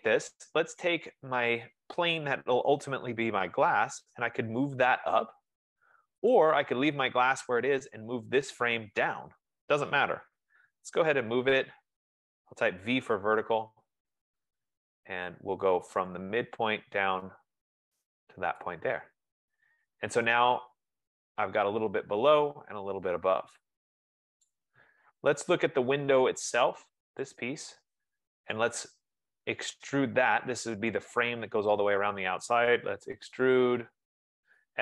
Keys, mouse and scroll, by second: 1.4 click, 6.5 click, 8.5 click, 10.7-12.7 typing, 13.1 Return, 16.5 click, 18.7 click, 19.0 click, 21.6 F15, 25.7 right click, 25.7-26.4 scroll, 27.1-27.4 scroll, 27.5 click, 31.9 right click, 31.9-33.0 scroll, 32.9-34.8 typing.